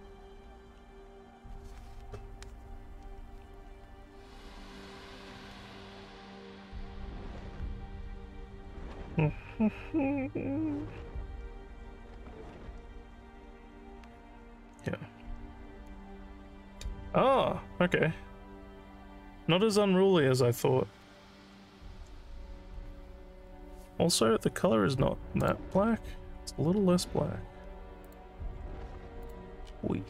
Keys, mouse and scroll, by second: 25.4 click, 28.1 click, 29.3 click, 29.6 scroll up 4.